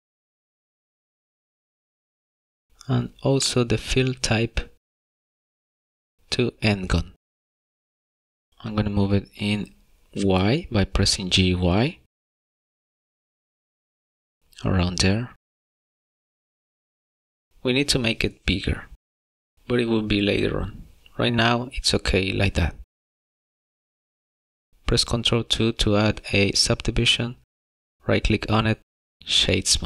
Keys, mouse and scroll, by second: 3.5 scroll down 1, 4.2 middle click, 5.7 click, 8.5 middle click, 9.7 shift+middle click, 11.0 y, 15.3 middle click, 21.3 middle click, 27.7 ctrl+2, 28.5 middle click.